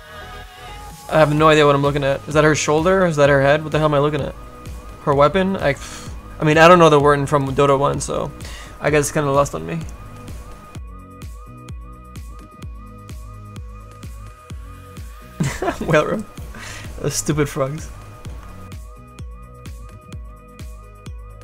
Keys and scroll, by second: 20.6 s.